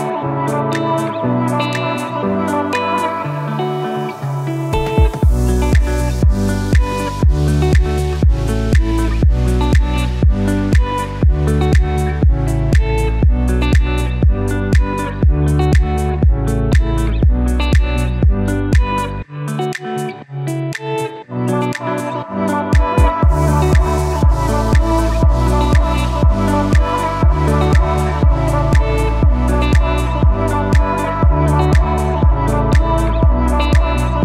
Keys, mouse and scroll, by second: 5.1 scroll down 1, 5.3-7.5 typing, 5.8 click, 6.1 click, 6.5 click, 6.9 click, 7.5 click, 7.5 click, 10.7 ctrl+x, 11.3 click, 14.0-16.0 alt+shift+drag, 19.9 click, 21.9 scroll down 1, 22.3 click, 24.0 alt+shift+click, 26.3 right click, 29.0-30.5 drag, 30.5 right click, 33.5 click.